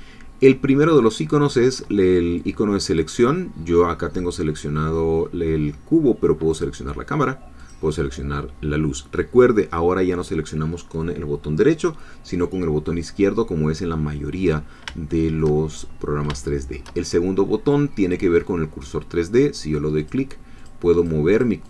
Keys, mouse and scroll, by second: 2.5-4.7 drag, 4.9-6.5 scroll down 2, 6.5-7.9 drag, 7.9-9.0 scroll down 2, 14.5-15.1 scroll up 3, 15.1 shift+middle click, 16.4 shift+middle click, 18.0 click, 20.0 click, 21.0-21.6 drag.